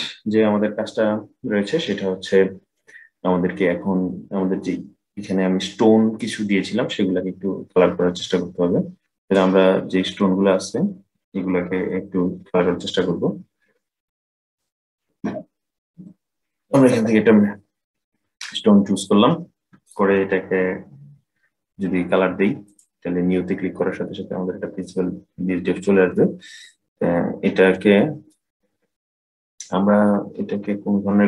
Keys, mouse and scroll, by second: 8.9 click, 13.3-14.2 scroll down 4, 14.2 middle click, 14.9-15.6 scroll down 1, 15.6 scroll down 1, 15.9 click, 17.3-20.6 scroll down 10, 20.6 scroll down 1, 22.4-23.5 drag, 23.5-24.5 scroll up 17, 24.5-26.3 middle drag, 26.3-27.5 scroll up 2, 27.5-30.6 middle drag.